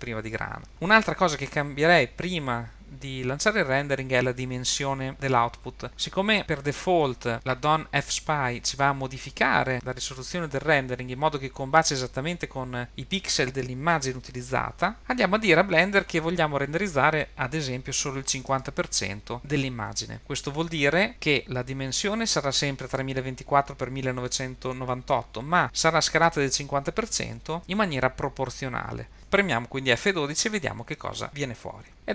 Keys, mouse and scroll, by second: 5.1 click, 5.9-7.0 scroll up 2, 16.1-21.1 drag.